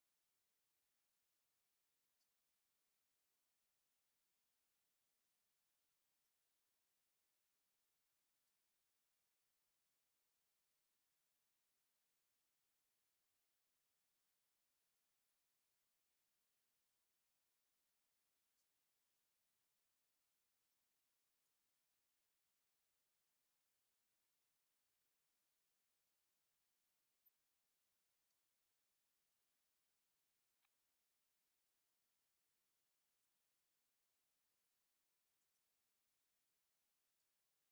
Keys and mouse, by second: 3.8 click, 6.6 click, 7.7-17.9 drag, 21.2 click, 24.1-25.5 drag, 27.1 click, 29.0-33.0 drag.